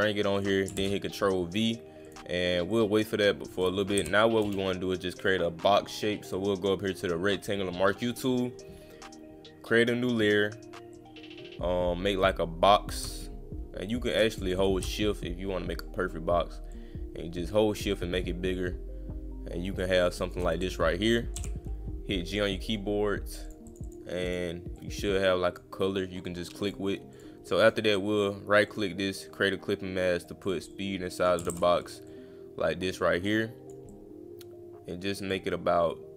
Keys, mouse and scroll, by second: 0.3 click, 2.0 click, 2.7 click, 3.4 click, 5.1 click, 8.2 click, 10.9-14.1 drag, 14.4 click, 14.6 click, 16.7-20.3 shift+drag, 22.3 click, 23.5 click, 23.7 click, 23.8 click, 24.3 click, 24.8 click, 26.6 click, 27.2 click, 27.6 click, 28.7 click, 30.3 click, 30.7 click, 32.1-33.7 drag, 33.9-35.3 drag.